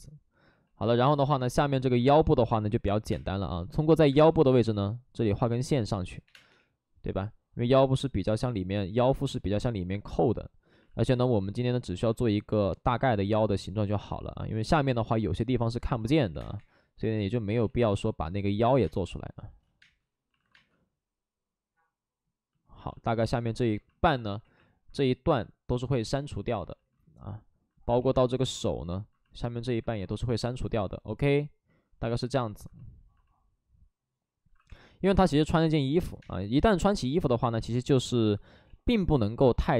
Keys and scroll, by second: 1.8 alt+s, 2.0 space, 3.0 space, 3.0 5, 4.0 space, 5.1 ctrl+z, 6.2 3, 6.4 space, 6.4 3, 7.6 2, 10.8 alt+s, 12.0 alt+s, 16.2 3, 16.5 3, 16.5 space, 17.5 ctrl+z, 18.7 space, 20.3 alt+s, 20.3 space, 20.5 space, 24.3 ctrl+z, 25.5 ctrl+z, 27.9 ctrl+z, 34.3 alt+s, 34.6 3, 36.1 space, 37.5 space, 38.6 ctrl+z, 38.6 space.